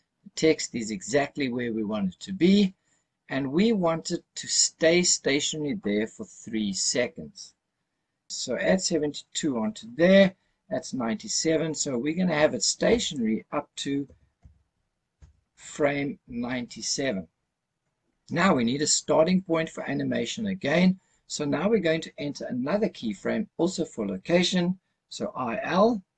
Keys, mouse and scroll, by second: 12.9-15.2 drag.